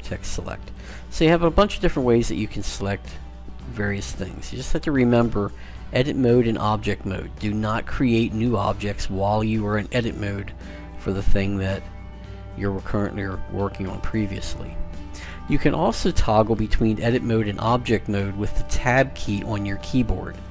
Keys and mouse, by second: 0.7 click, 1.0-6.1 right drag, 11.2 click, 19.0 Tab.